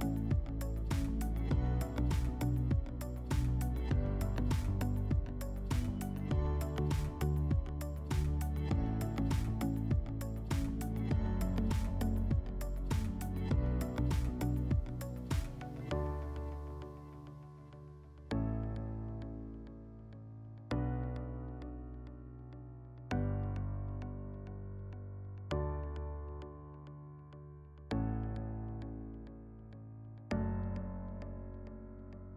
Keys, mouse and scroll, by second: 0.0-2.1 typing, 2.2 Return, 14.2-15.4 middle drag, 15.4-17.5 drag, 18.1 click, 18.9 click, 20.0 click, 20.9 click, 23.4 click, 25.4 click, 26.4-28.5 middle drag, 28.5 click, 29.3 click, 31.5 click, 32.1 right click.